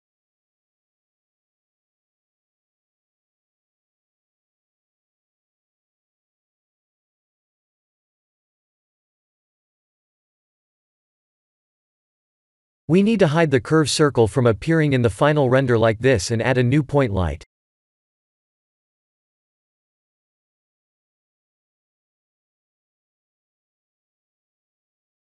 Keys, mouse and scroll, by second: 3.5 click, 19.8 click, 21.9 click, 22.8 click, 23.8 click.